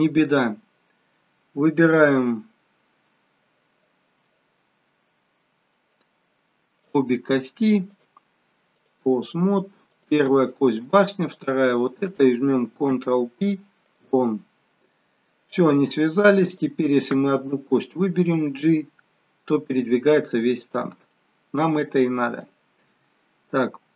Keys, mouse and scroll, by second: 7.8 shift+click, 11.2 click, 12.4 shift+click, 12.8 ctrl+p, 18.3 g, 21.1 middle click, 22.9 g.